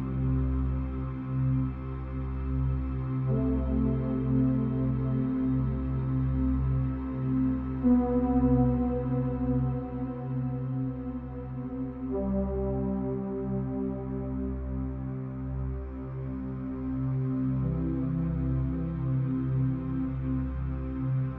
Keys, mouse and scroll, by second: 0.7-1.7 middle drag, 1.7 shift+click, 2.2 shift+click, 2.7 shift+click, 3.1-4.3 middle drag, 4.3 shift+click, 4.7 shift+click, 5.2 shift+click, 5.6-6.7 middle drag, 6.7 shift+click, 7.2 shift+click, 7.7-9.9 middle drag, 9.9 shift+click, 10.5-12.2 middle drag, 12.2 shift+click, 13.8 shift+click, 14.9 ctrl+l, 15.9 click, 16.3-17.8 middle drag, 17.8 KP_0, 19.7 click, 20.2 shift+a.